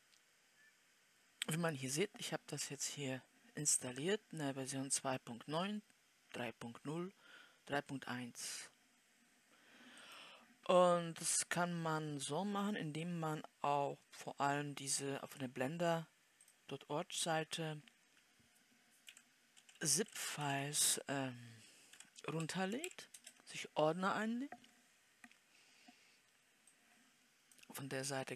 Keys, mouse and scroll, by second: 16.8 click, 18.1 click.